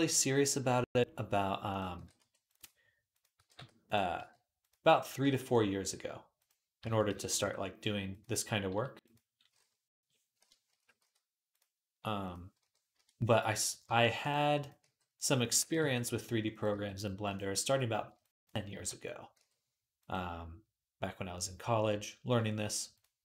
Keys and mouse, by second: 1.8 g, 3.0 click, 3.0-4.4 middle drag, 3.2 g, 4.0 g, 5.1 g, 6.7 a, 6.9 s, 8.6 s, 8.9-15.2 middle drag, 10.6 s, 13.7 g, 14.6 g, 15.3-17.1 middle drag, 15.4 g, 16.5 g, 17.2-23.2 middle drag, 18.6 g.